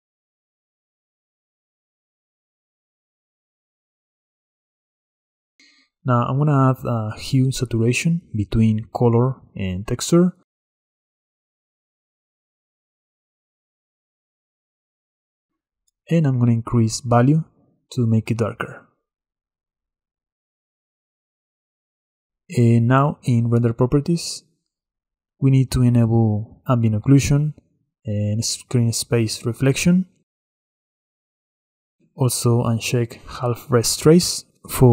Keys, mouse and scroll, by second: 1.3-3.6 drag, 4.5-5.5 middle drag, 5.5-6.0 scroll down 4, 6.0 click, 6.7-7.1 middle drag, 7.1 shift+a, 17.7-18.3 scroll up 6, 18.9-23.0 shift+drag, 27.1 click, 28.0 click, 30.1 click, 30.9-33.0 drag.